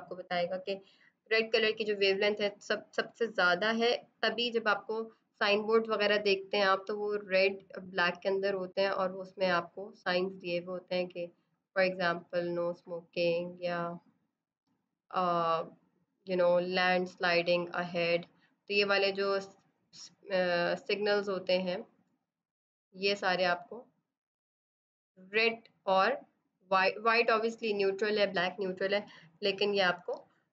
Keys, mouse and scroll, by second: 5.5 click, 11.3 click, 28.8 click.